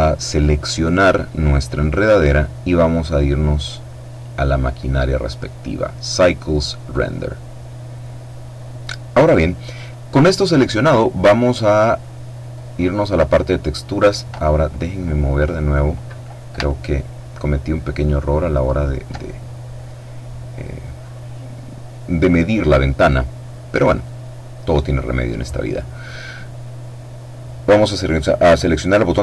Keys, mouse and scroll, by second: 0.0 right click, 3.8 click, 6.6 click, 11.5-12.7 middle drag, 16.3-19.2 alt+drag, 19.5-21.0 middle drag, 23.6 click.